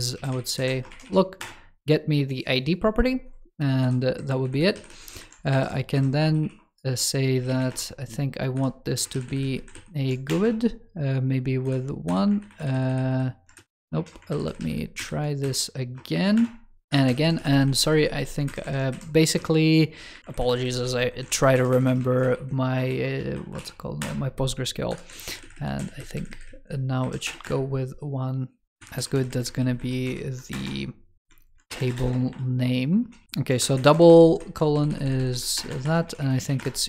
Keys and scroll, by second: 4.3 alt+Left, 5.4 alt+Right, 9.0 alt+Left, 11.5 alt+Up, 12.3 alt+Left, 14.1 alt+Left, 14.8 alt+Right, 16.9 alt+Left, 17.6 alt+Left, 18.3 alt+Right, 20.2 alt+Left, 25.0 alt+Left, 28.9 alt+Left, 29.9 alt+Right, 33.6 alt+Left.